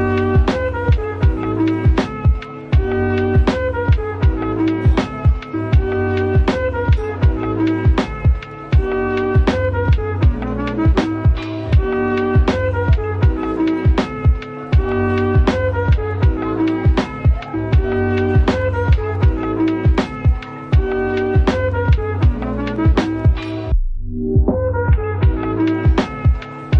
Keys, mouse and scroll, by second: 1.2-1.9 typing, 7.3 Tab, 8.0-8.7 typing, 10.3 right click, 10.3 typing, 12.0 right click, 12.0 typing, 13.7 right click, 13.8 typing, 15.4 typing, 16.5 typing, 21.5 right click, 23.3 ctrl+z, 23.7 middle click, 25.1 shift+double click, 25.5 shift+click.